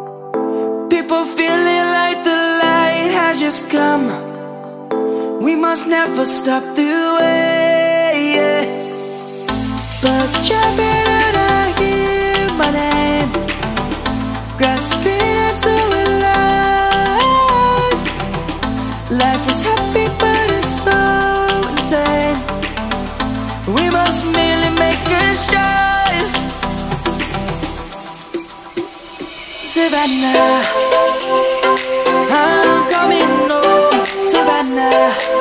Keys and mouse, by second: 3.2 middle click, 4.6 click, 7.1 click, 8.1 middle click, 11.4 click, 12.5 shift+click, 13.5 shift+middle click, 15.2 shift+click, 15.8 middle click, 19.2 shift+click, 20.3 ctrl+b, 22.3 right click, 22.7 middle click, 24.1 ctrl+b, 26.0 right click, 26.5 Tab, 28.4 ctrl+a, 30.0 click, 31.5 Tab, 32.6 ctrl+b, 35.2 click.